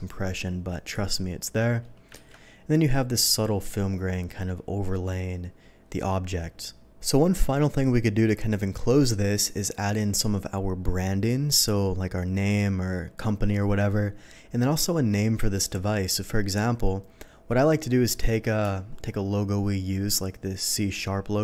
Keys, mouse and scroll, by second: 0.8 click, 2.1 ctrl+d.